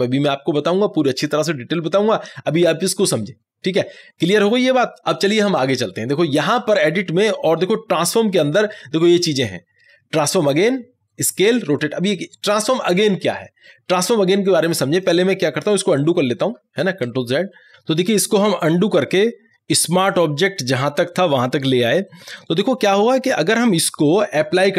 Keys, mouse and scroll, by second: 6.6 ctrl+t, 6.6 click, 15.0 click, 16.9 ctrl+z, 22.2 click.